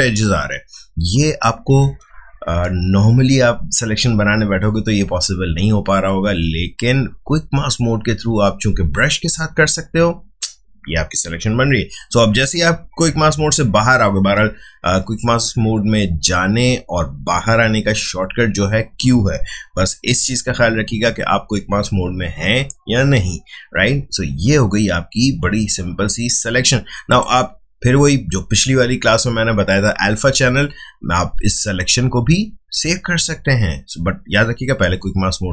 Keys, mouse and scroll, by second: 19.9 q, 27.0 click, 30.4 right click.